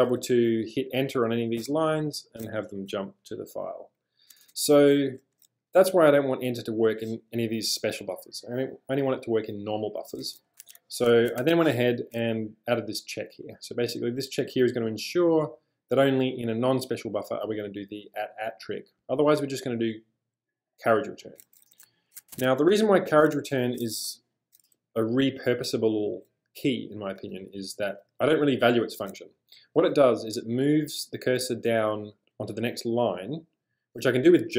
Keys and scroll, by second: 0.0-0.1 typing, 1.7 Return, 4.4 space, 4.5 space, 10.6 super+Tab, 11.4 shift+super+}, 22.3 super+Tab, 23.9 g, 24.0 g, 27.3 j.